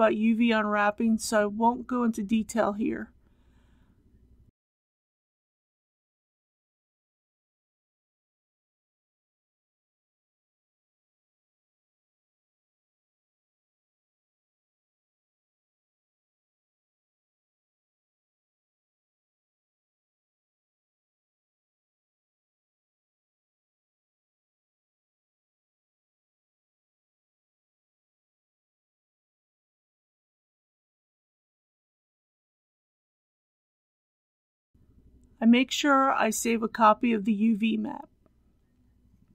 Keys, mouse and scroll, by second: 0.3 alt+click, 1.4 middle click, 4.5 alt+shift+click, 4.6 middle click, 5.0 KP_1, 5.5 shift+click, 6.2 right click, 6.3 click, 6.4 a, 6.6 click, 6.7 middle click, 7.2 click, 7.3 3, 7.8 a, 8.0 click, 9.5-10.2 scroll up 2, 10.0 alt+2, 10.2 KP_7, 10.3 click, 10.4 shift+middle click, 11.1 middle click, 11.8 shift+click, 12.2 KP_3, 12.5 KP_3, 12.8 middle click, 13.5 ctrl+z, 13.7 right click, 13.8 click, 13.9 a, 14.1 click, 14.9 KP_1, 15.0 scroll down 1, 15.2 click, 15.4 shift+middle click, 15.6 middle click, 15.8-16.5 scroll up 2, 16.0 shift+middle click, 16.8 alt+click, 17.1 alt+click, 17.2 middle click, 17.5 alt+shift+click, 17.7 shift+middle click, 17.9 click, 18.0 l, 18.3 scroll down 1, 18.4 middle click, 18.7 alt+click, 19.3 a, 19.5 u, 19.6 click, 19.9 middle click, 20.6 middle click, 20.8 scroll up 1, 20.9 middle click, 21.0 alt+shift+click, 21.1 shift+middle click, 21.9 right click, 22.1 u, 22.2 click, 22.4 scroll down 1, 22.6 click, 22.8 g, 22.9 click, 23.5 scroll down 1, 23.8 scroll up 1, 23.8 shift+middle click, 24.6 click, 25.2 scroll up 1, 25.3 ctrl+z, 25.5 click, 25.6 right click, 25.7 click, 25.8 u, 25.9 click, 26.2 scroll down 1, 26.3 click, 26.4 g, 26.7 click, 27.3 l, 27.5 click, 28.0 click, 28.2 Tab, 28.3 shift+middle click, 28.4 click, 28.5 shift+middle click, 28.7 Tab, 29.0 click, 29.8 scroll up 1, 30.0 click, 30.3 KP_0, 30.5 BackSpace, 30.8 KP_2, 31.0 click, 32.3 click, 32.9 click, 33.8 click, 34.6 s, 35.0 click.